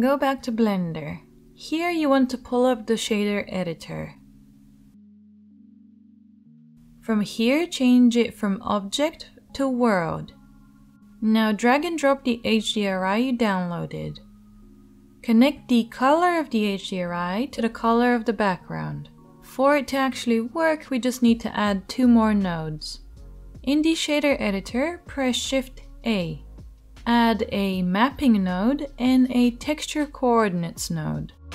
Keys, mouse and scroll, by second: 4.2 middle click, 6.4-9.5 drag, 6.4 middle click, 6.4 right click, 7.4-9.5 middle drag, 7.4-9.5 right drag, 12.1-14.4 drag, 15.2-24.9 middle drag, 24.9-31.5 shift+drag, 24.9 shift+a, 27.7 p.